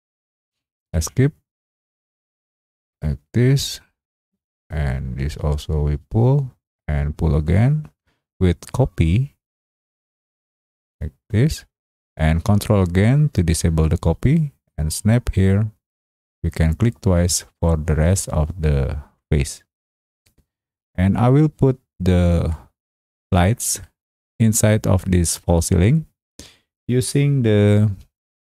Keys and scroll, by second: 0.8 Escape, 23.0 space.